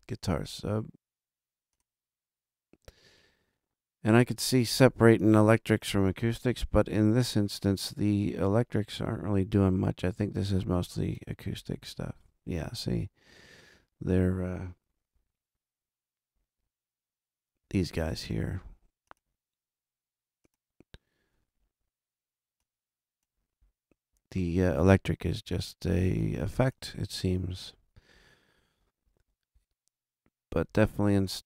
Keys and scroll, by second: 6.8 super+=, 15.1 alt+a.